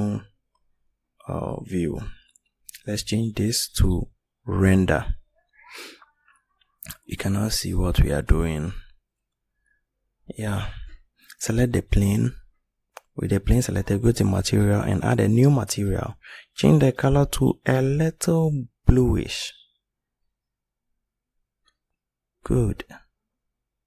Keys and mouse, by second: 9.1 right click.